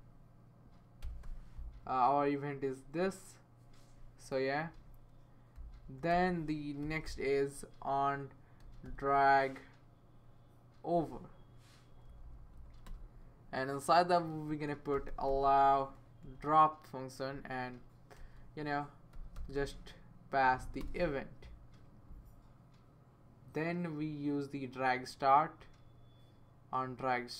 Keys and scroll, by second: 0.0-1.5 typing, 4.7 Right, 5.8 Right, 6.1-9.1 typing, 11.9 Down, 12.1 Down, 12.2 Down, 12.5 Down, 14.4-15.8 typing, 16.2 Return, 18.2-20.0 typing, 20.8 Return.